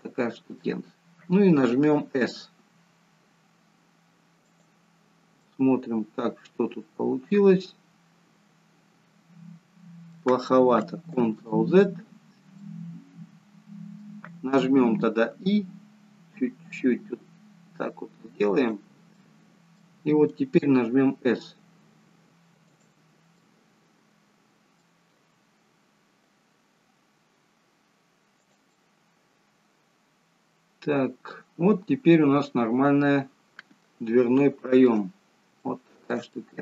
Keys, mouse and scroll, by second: 2.0-2.8 scroll down 2, 2.8 s, 5.1-5.5 scroll up 3, 5.5 middle click, 11.2 ctrl+z, 12.7 middle click, 15.4 i, 20.4 middle click, 20.7 s, 23.5 middle click, 25.2 s, 28.9 middle click, 34.5 shift+middle click, 35.1-35.7 scroll down 2, 35.7 shift+middle click, 36.4 middle click.